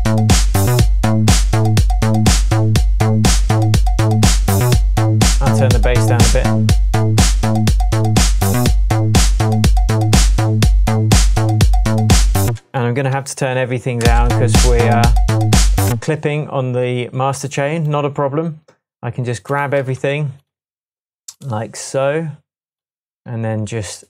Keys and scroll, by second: 12.8 space, 13.2 Tab, 14.1 space, 15.9 space.